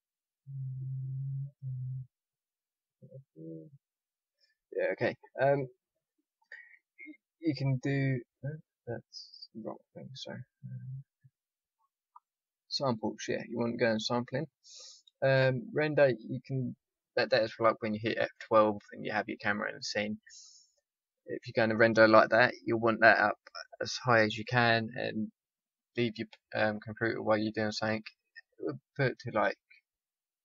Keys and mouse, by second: 12.9-19.4 drag.